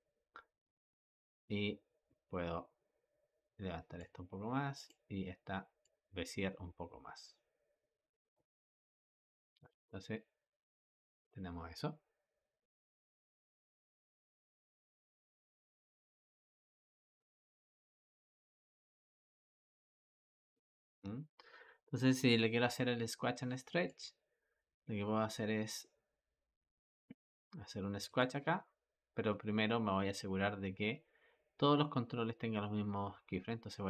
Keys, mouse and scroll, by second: 0.5 middle click, 1.3 click, 4.6 click, 5.7 click, 9.6 space, 20.9 Escape, 23.7-26.8 drag, 27.9 click.